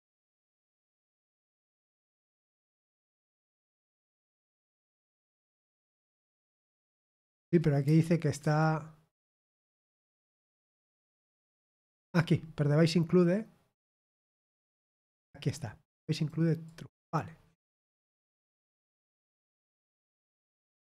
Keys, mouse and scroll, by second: 14.3-15.6 drag, 16.6 click, 17.6 click, 18.9 click.